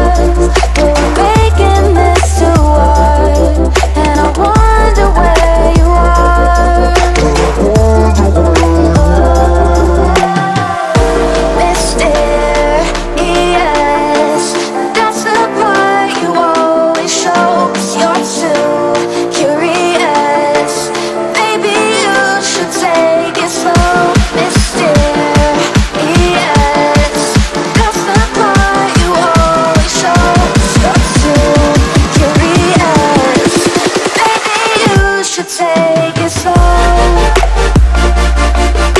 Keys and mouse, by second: 0.3 shift+click, 1.6 click, 3.8 space, 3.9 click, 6.4-8.5 drag, 11.9-12.8 drag, 20.5 space, 20.6 click, 20.8 space, 22.3 click, 22.5-23.2 space, 23.6 click, 33.0 ctrl+c, 33.5 click.